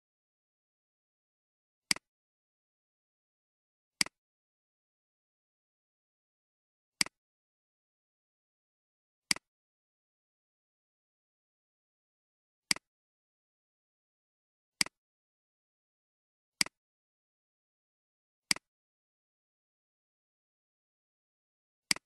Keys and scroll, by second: 0.5 =, 2.6 *, 4.7 Return, 8.1 7, 9.6-12.0 typing, 13.2-13.9 typing, 15.4 *, 17.2 Return, 20.1-20.7 typing.